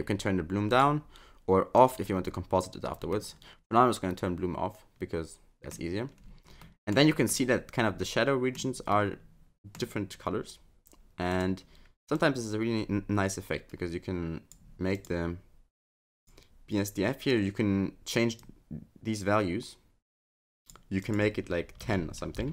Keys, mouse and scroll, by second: 0.7 click, 1.8 click, 3.1 scroll up 1, 3.2 middle click, 6.3-6.6 scroll up 4, 6.6 middle click, 7.3 middle click, 8.9 middle click, 11.3 click, 15.0 click, 16.2 click.